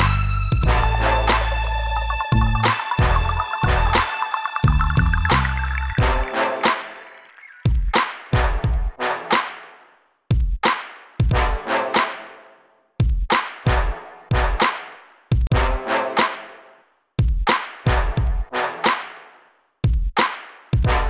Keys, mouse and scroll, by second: 0.5 click, 2.5 scroll down 2, 4.3 click, 5.0 scroll down 2, 5.9 scroll up 2, 7.5 middle click, 8.5 scroll up 2, 9.3 click, 12.0 scroll down 2, 13.5 p, 16.0 scroll up 2, 18.0 click, 18.1 click, 19.5 click.